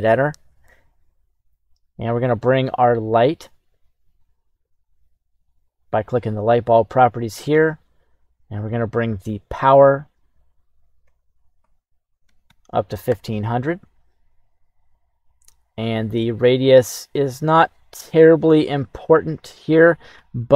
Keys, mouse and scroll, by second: 1.9 right click, 5.6 click, 9.4-13.2 drag, 12.4 KP_0, 15.7-20.5 drag.